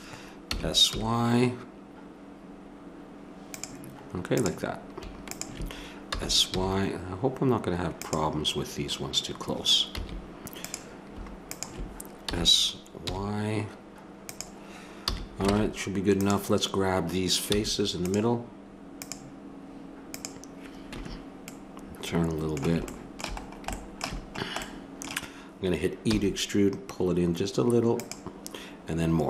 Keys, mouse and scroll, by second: 0.5 s, 6.1 s, 9.9 a, 12.2 s, 15.0 a, 15.5 ctrl+Tab, 17.5 c, 21.1 click, 23.1 middle click, 23.5 click, 25.6 click, 26.1 e.